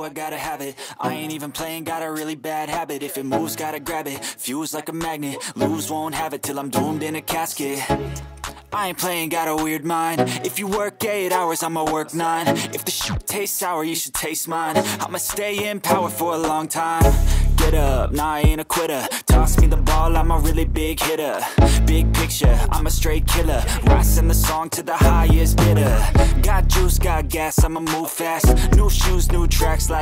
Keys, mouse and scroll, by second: 0.1 typing, 1.7-2.2 typing, 3.5 typing, 6.5 shift+click, 9.6 shift+click, 10.2 shift+click, 12.0 double click, 16.8 double click, 27.3 double click, 29.8 ctrl+space, 29.9 ctrl+click.